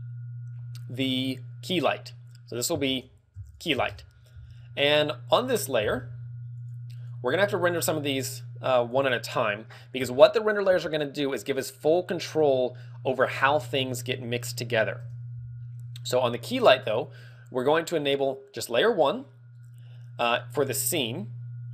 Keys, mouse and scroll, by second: 0.9 click, 1.7 click, 8.7 click, 10.1 shift+middle click, 11.1 z, 11.2 middle click, 11.8 middle click, 11.9 shift+middle click, 12.7 middle click, 13.4 ctrl+w, 14.0 z, 15.0 KP_0, 15.2 ctrl+w, 15.2 KP_0, 18.2 click.